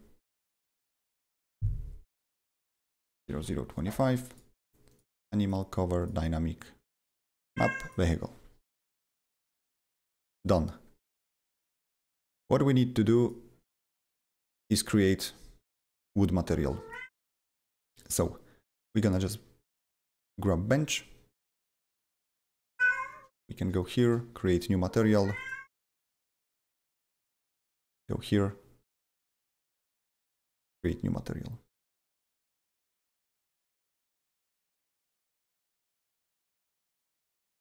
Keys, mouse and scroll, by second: 0.2 click, 1.0 click, 2.3 click, 2.9-3.9 typing, 4.3 click, 4.9 click, 5.4 click, 6.0 click, 7.3 click, 7.8 click, 10.3 click, 11.3 click, 13.2 click, 14.0 click, 15.0 click, 16.6 click, 17.7 click, 18.9 click, 21.9 click, 22.2 double click, 23.8 click, 25.2 click, 25.4 double click, 26.8 click, 27.3 click, 27.8 click, 27.9 double click, 29.7 click, 29.7 click, 30.6 click, 30.7 double click, 31.7 click, 32.2 click, 32.3 double click, 33.5 click, 33.8 double click, 34.3 click, 34.6 click, 34.9 click, 35.0 double click, 36.4 ctrl+a, 37.2-37.6 typing.